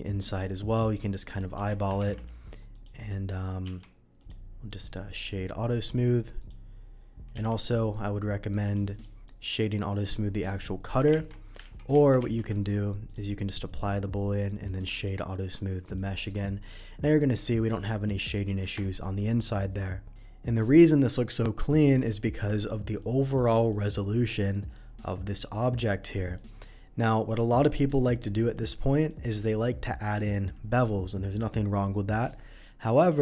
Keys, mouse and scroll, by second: 1.0 click, 1.2 right click, 1.5 Tab, 1.9 shift+2, 2.2 middle drag, 2.7 click, 3.1 middle click, 3.4 middle click, 3.6 q, 4.1 click, 4.6 right click, 5.1 click, 5.4 middle click, 6.3 click, 7.4 q, 8.6 click, 8.9 click, 9.2 right click, 9.9 click, 11.0 shift+2, 11.6 ctrl+z, 12.1 ctrl+z, 13.0 click, 13.6 click, 14.0 middle click, 14.4 right click, 14.9 click, 15.6-15.9 scroll up 1, 15.9-16.3 middle drag, 16.5 scroll up 1, 17.2 middle click, 18.6 Tab, 19.1 middle click, 20.6 middle click, 21.6 middle click, 23.0 middle click, 23.7 middle click, 26.0 middle click, 29.0 middle click, 33.1 middle click.